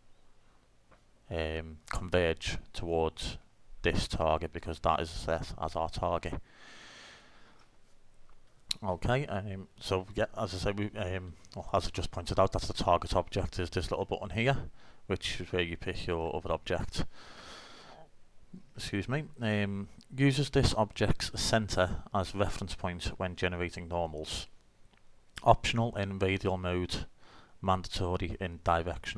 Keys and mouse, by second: 7.2 click, 9.6-13.8 middle drag, 15.6-16.7 middle drag.